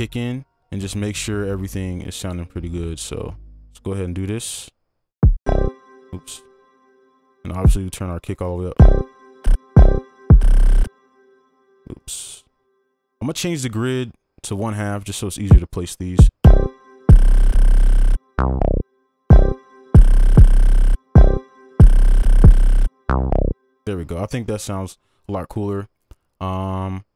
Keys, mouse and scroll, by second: 2.1 right click, 5.4 space, 5.8 space, 5.9 right click, 8.5 right click, 8.7 right click, 9.5 space, 10.8 space, 11.3 right click, 16.4 space, 19.0 space, 20.9 space, 21.0 right click, 21.1 space, 23.7 space.